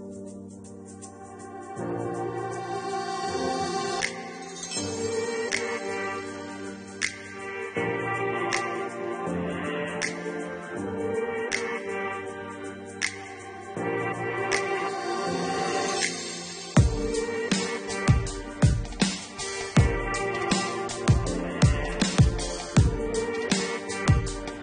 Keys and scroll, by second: 1.3 Delete, 18.6 2, 18.9 4, 20.3 8, 20.9 2, 23.1 Return.